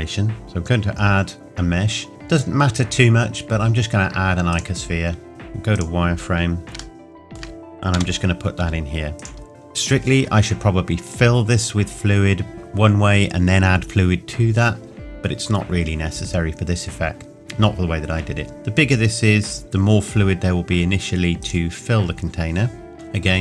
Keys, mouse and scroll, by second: 0.4 shift+a, 4.5 click, 5.3 z, 5.8 click, 6.3-6.7 scroll up 1, 7.0 shift+middle click, 8.0 g, 9.2 click, 18.5 s, 21.4 click, 22.2-22.9 scroll up 1, 22.9 ctrl+a.